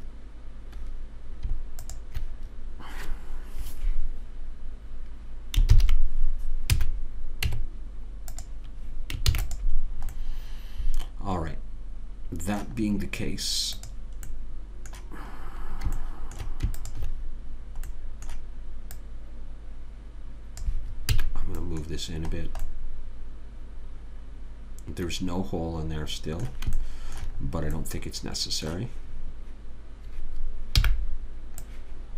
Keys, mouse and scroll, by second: 6.1 ctrl+j, 7.1 a, 7.8 Tab, 9.7 ctrl+s, 13.2 middle click, 14.1 click, 15.8-20.6 middle drag, 17.1 click, 18.9-20.6 right drag, 19.3 click, 21.5 a, 21.8-24.7 middle drag, 27.2-31.2 middle drag, 31.2 b.